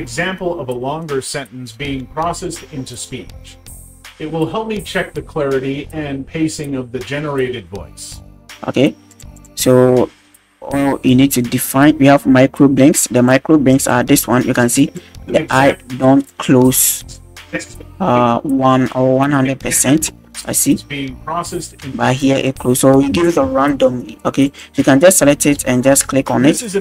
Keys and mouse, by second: 8.8 space, 9.1 click, 9.3-13.4 drag, 13.9 click, 15.1 space, 15.7 space, 16.3 click, 20.6 space, 21.9 space, 22.3 click, 24.5-25.5 drag, 26.1 space.